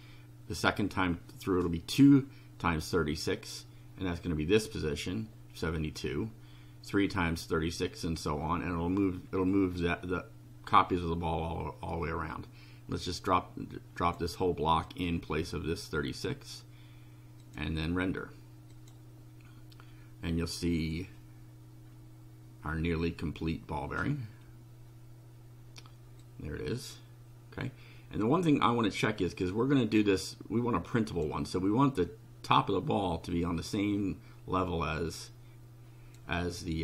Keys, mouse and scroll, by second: 12.3-14.3 drag, 14.9-16.7 drag, 17.4 click, 18.7 click, 26.2-31.4 drag, 33.7-36.3 drag.